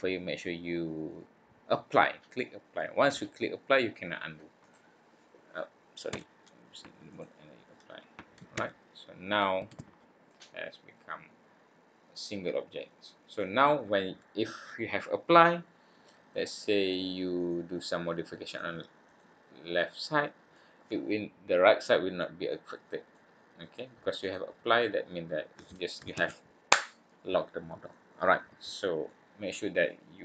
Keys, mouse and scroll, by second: 4.6 click, 6.0 Tab, 7.1 click, 8.5 Tab, 9.7 alt+a, 10.2 middle click, 13.4 middle click, 15.4 middle click, 17.3 click, 18.4 click, 19.0 click, 19.7 click, 20.5 middle click, 22.2 middle click, 23.1 click, 23.3 click, 24.2 click, 24.8 click, 26.1 ctrl+z, 27.9 middle click, 29.0 middle click.